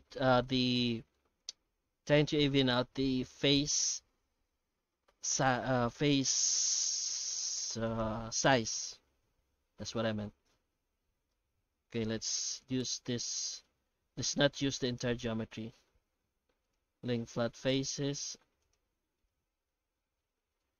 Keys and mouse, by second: 0.8 shift+middle click, 1.3 a, 5.8 Tab, 7.1 alt+h, 7.6 alt+a, 7.8 right click, 8.2 Tab, 8.6 a, 9.0 Tab, 11.5 Tab, 11.7 alt+a, 12.2 3, 12.4 right click, 13.2 shift+right click, 13.6 middle click, 14.8 shift+right click, 15.2 middle click, 16.2 q, 17.5 middle click, 18.2 shift+right click, 19.0 q, 19.8 Tab, 20.0 middle click, 20.3 shift+q.